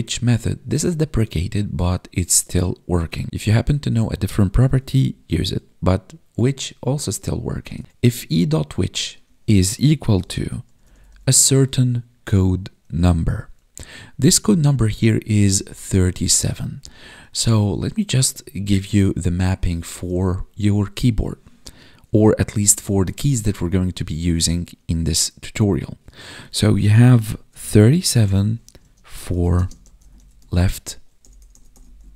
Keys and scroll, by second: 10.1 space, 11.2 space, 16.7 Up, 19.7 space, 28.7 space, 29.5 space.